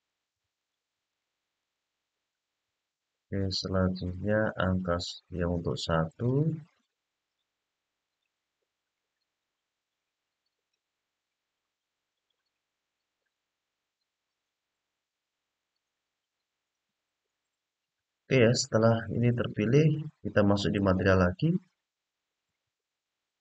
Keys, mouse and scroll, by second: 0.3 shift+click, 0.8 shift+click, 1.3 shift+click, 2.0-3.8 middle drag, 4.3 middle click, 5.8 shift+click, 6.4 shift+click, 7.0 shift+click, 7.8 shift+click, 8.7-10.4 middle drag, 11.0-13.1 middle drag, 15.3-18.4 middle drag, 19.1 middle click, 20.5 click.